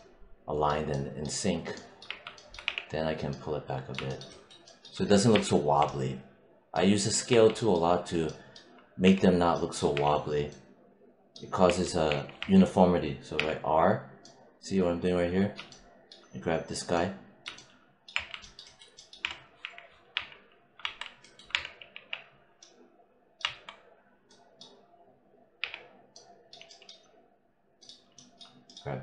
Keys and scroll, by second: 1.9 5, 2.5 w, 5.2 3, 7.2 1, 8.9 4, 11.5 4, 18.0 4, 19.1 4, 21.4 3, 21.8 w, 23.3 1, 25.5 r.